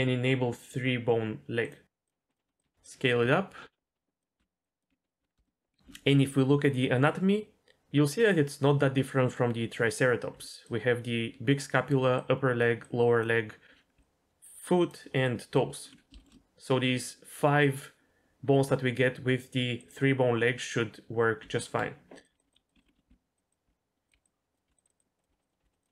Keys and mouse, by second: 2.3 click, 2.4 s, 2.6 g, 5.2 Tab, 5.4 shift+middle click, 5.7 KP_3, 10.3-15.8 typing, 10.6 click, 12.1 click, 12.8 click, 14.0 click, 15.2 click, 16.2 shift+middle click, 21.4 Tab, 22.3-23.1 typing, 22.7 Tab, 22.8 click, 23.3 click, 23.6 Tab, 24.0 click, 24.1-25.9 typing, 24.8 click, 25.2 click, 25.5 click, 25.8 click.